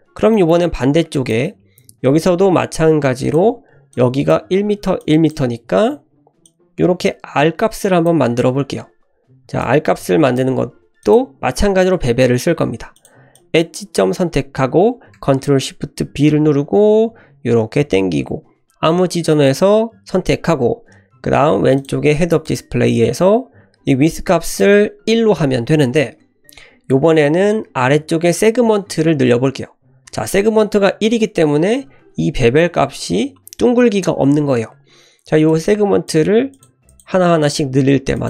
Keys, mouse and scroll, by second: 0.3 shift+middle click, 1.1 click, 3.2 click, 3.9 click, 5.0 click, 6.4-8.0 drag, 8.5 ctrl+z, 9.6 ctrl+click, 11.0 click, 12.9 click, 13.3 click, 16.3 ctrl+shift+b, 16.3 l, 21.7 click, 22.4 click, 24.4-25.5 drag, 35.4-37.4 drag, 38.1 click.